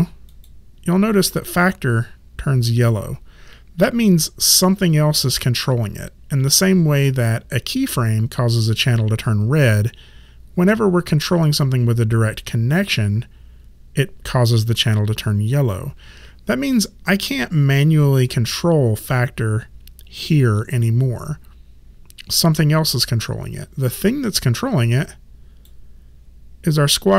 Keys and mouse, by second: 0.3 click, 25.0 click.